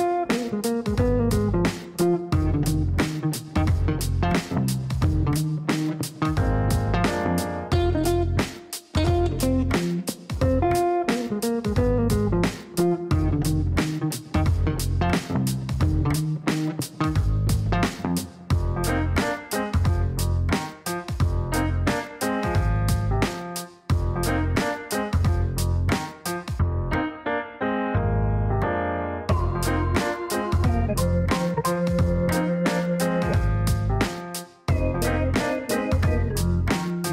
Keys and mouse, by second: 1.3 click, 3.4 right click, 4.4 click, 5.3 click, 6.0 click, 6.8 click, 8.1 Delete, 12.8 click, 13.7 click, 14.2 click, 15.4 click, 16.1 click, 17.4 BackSpace, 18.0 right click, 19.2 click, 20.4-23.9 typing, 20.5 KP_Add, 24.1 Down, 24.6 Return, 32.2 click, 34.4 KP_2, 36.5 click.